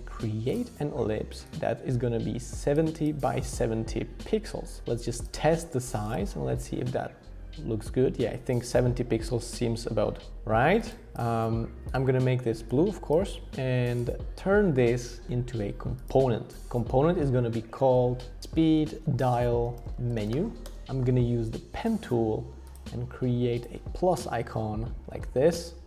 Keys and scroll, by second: 17.6 super+r, 18.1-21.7 typing, 24.2 Return, 25.0 Up, 25.1 Up, 25.5 Return.